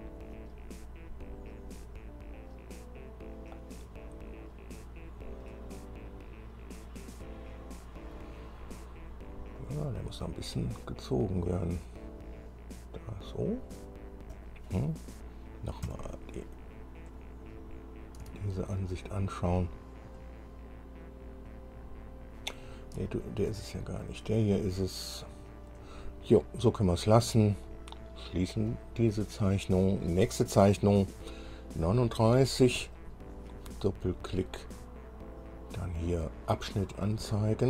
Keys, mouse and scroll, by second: 0.0 scroll up 2, 4.9 scroll down 2, 5.6-8.4 drag, 9.8 click, 11.7-14.0 drag, 14.5 click, 16.0 KP_1, 16.8-17.9 scroll down 3, 19.8-20.2 scroll up 1, 22.7-23.0 scroll down 1, 23.2 shift+click, 24.1-24.8 shift+scroll up 5, 25.4 scroll up 2, 26.0-26.3 scroll down 2, 28.9 click, 33.0 click, 36.8 click.